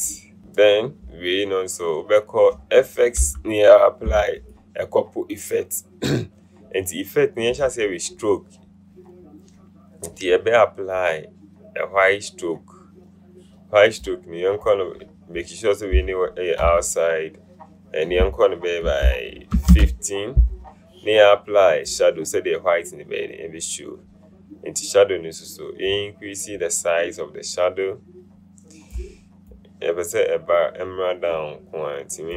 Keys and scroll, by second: 16.3-16.8 typing, 19.8 KP_1, 19.9 KP_5.